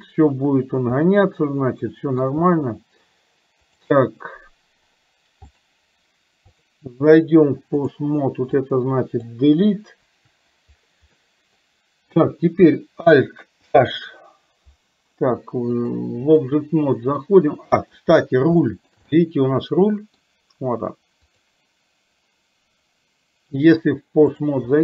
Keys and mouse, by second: 1.1-2.3 middle drag, 2.4 space, 3.9 click, 5.6 click, 6.7-8.1 drag, 8.7 click, 10.1 Delete, 11.3 middle click, 13.6 alt+h, 15.8 click, 17.3 middle click, 18.7 shift+middle click, 19.2-20.2 middle drag, 21.3 click, 23.7 click.